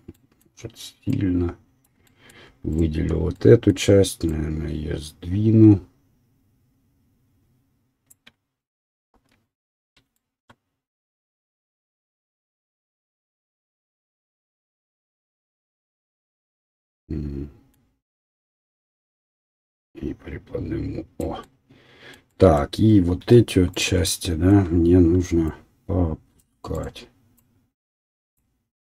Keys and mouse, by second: 2.7 alt+click, 2.7 alt+middle click, 9.1 KP_7, 12.1-14.3 drag, 14.1 s, 14.3-19.1 middle drag, 19.1 click, 21.5 middle click, 23.2 1, 26.0-28.3 right drag, 28.3-28.9 drag.